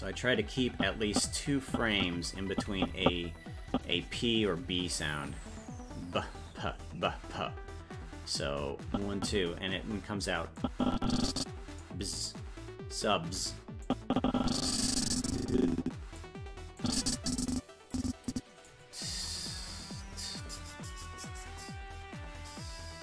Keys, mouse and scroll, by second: 0.7 Left, 1.7 Right, 2.5 Left, 3.7 Left, 3.7 Right, 8.9 Right, 10.6-11.8 drag, 13.8-16.2 drag, 16.8-18.7 drag.